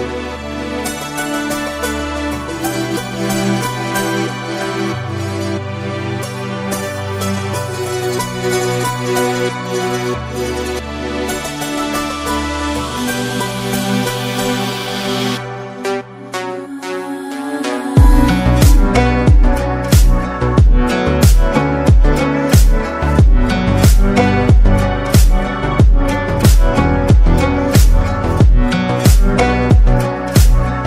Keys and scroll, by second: 8.3 ctrl+z, 9.0 ctrl+z, 9.1 ctrl+z, 9.4 ctrl+z, 9.8 ctrl+z, 19.7 ctrl+d.